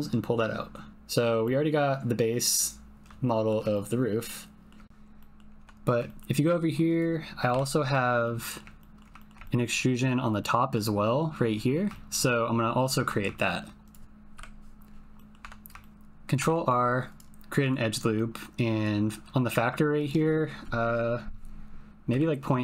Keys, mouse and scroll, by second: 0.9 middle click, 0.9 typing, 1.4 middle click, 1.6 click, 2.0 middle click, 2.0 click, 2.2 middle click, 2.2 click, 2.5-3.5 middle drag, 3.7 ctrl+middle click, 4.2 middle click, 5.1 middle click, 5.6 Tab, 6.0 shift+middle click, 6.3 shift+middle click, 6.9 click, 7.5 KP_Decimal, 7.5 middle click, 8.2 middle click, 8.7 ctrl+middle click, 9.1 shift+click, 9.4 ctrl+click, 10.3 click, 10.4 middle click, 11.9 shift+middle click, 13.3 shift+middle click, 13.8 click, 14.3 KP_Decimal, 15.1 click, 15.4 Tab, 15.7 shift+click, 16.4 ctrl+r, 17.6 click, 20.0-22.6 drag.